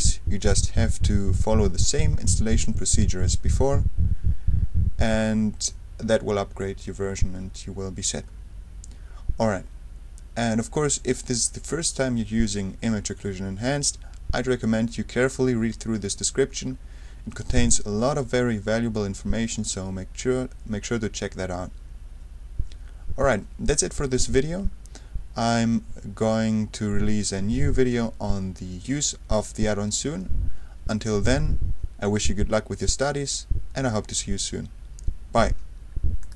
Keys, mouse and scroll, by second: 0.6-2.6 scroll down 2, 3.1-3.8 scroll down 2, 8.3-8.8 scroll up 2, 8.8-9.6 scroll up 1, 10.7-11.3 scroll down 2, 13.0-13.7 scroll up 1, 15.9-16.7 scroll down 1, 17.1-17.8 scroll down 2, 19.7-20.3 scroll down 1, 24.8-25.3 scroll down 2, 26.2-27.6 scroll up 2, 36.2 click.